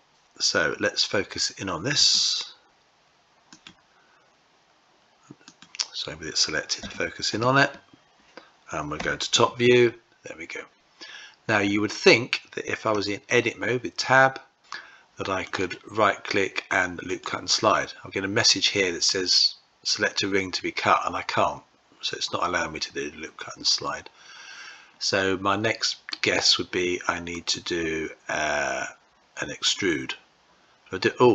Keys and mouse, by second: 1.8 q, 5.3 click, 6.7 q, 12.8 Tab, 15.4-26.2 right drag, 27.2-31.3 right drag.